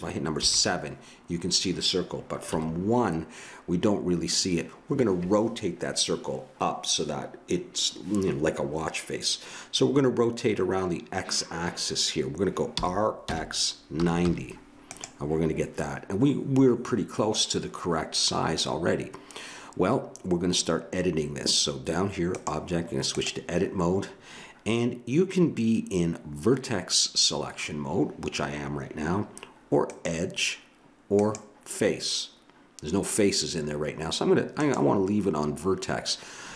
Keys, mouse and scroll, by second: 0.4 KP_7, 2.5 KP_1, 12.7 r, 23.3 click, 29.9-33.4 drag, 34.5-36.5 drag.